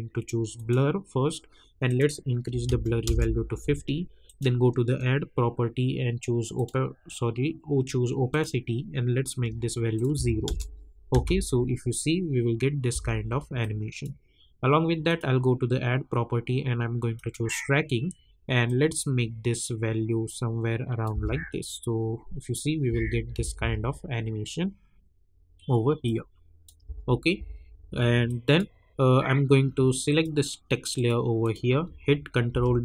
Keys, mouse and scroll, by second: 0.5 click, 3.0 Return, 4.2 click, 6.5 click, 9.1-9.9 scroll down 1, 9.9 click, 10.4 Return, 11.1 space, 13.6-21.1 drag, 21.1 space, 26.0 click, 26.8 space, 28.2 click, 28.8-30.0 scroll up 1, 30.0 click, 32.5 ctrl+d.